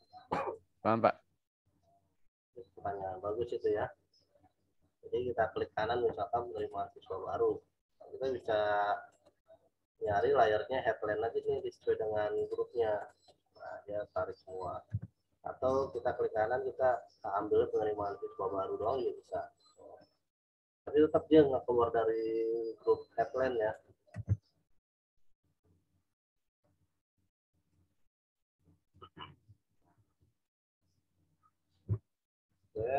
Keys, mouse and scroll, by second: 6.5 right click, 11.4 click, 12.3 right click, 12.9 click, 14.9 ctrl+z, 15.8 right click, 18.8 click, 24.1 ctrl+z, 25.1 right click, 26.6 click, 27.7 right click, 28.8 click, 29.4 z, 29.7 alt+click.